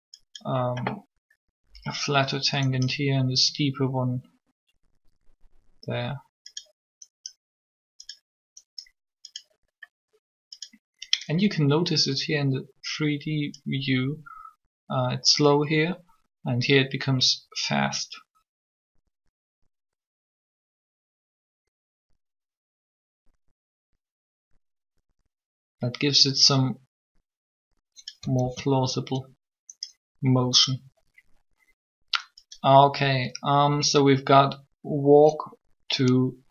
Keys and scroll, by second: 28.3 alt+a.